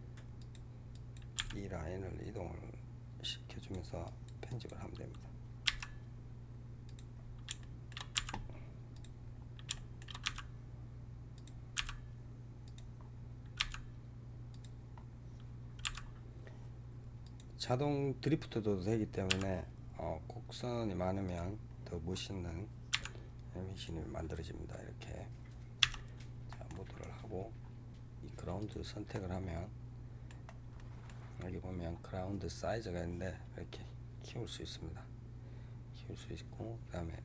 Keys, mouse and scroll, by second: 0.8 click, 1.2 g, 3.9 click, 4.4 click, 5.7 e, 7.1 scroll down 2, 7.5 shift+middle click, 8.2 e, 9.1 scroll down 3, 9.6 shift+middle click, 10.3 e, 11.8 e, 12.9 scroll down 2, 13.2-22.9 drag, 13.2-22.9 middle drag, 13.2-22.9 right drag, 13.7 e, 14.9-15.8 scroll down 1, 15.8 e, 17.6 scroll down 2, 19.3 e, 22.0 scroll up 2, 22.9 e, 24.6-25.9 scroll up 1, 25.9 Tab, 26.4-26.9 middle drag, 26.9 scroll down 1, 27.1-28.5 scroll up 6, 28.5 click, 29.0-30.4 middle drag, 30.4 scroll down 3, 30.6-32.4 middle drag, 32.4-35.4 drag.